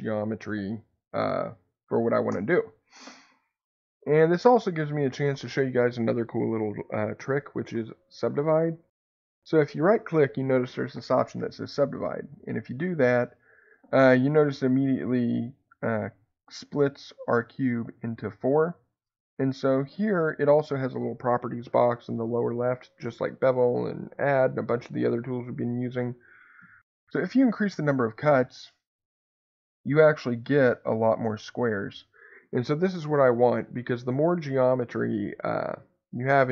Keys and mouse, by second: 2.3 Tab, 12.0-22.4 right drag, 27.8 click, 28.1 click, 28.3 click, 28.5 click, 28.7 click, 29.4 click, 29.6 click, 29.8 click, 30.2 click, 30.5 click.